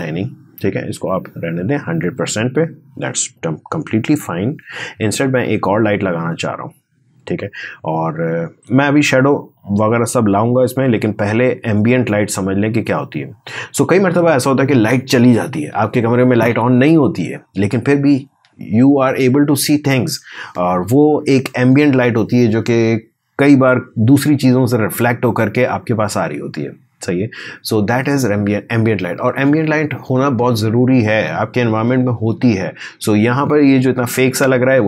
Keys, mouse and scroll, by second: 3.5-4.5 typing, 5.0 Return.